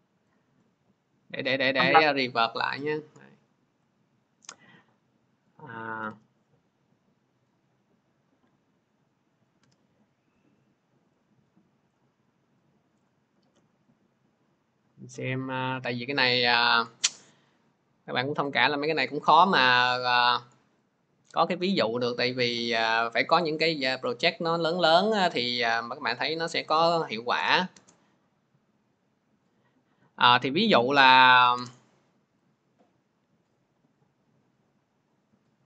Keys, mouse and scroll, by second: 0.5 scroll, 2.7 middle click, 4.6 click, 11.8 click, 12.9 click, 13.7 click, 18.9 click, 22.4 click, 25.1 click, 32.4 click.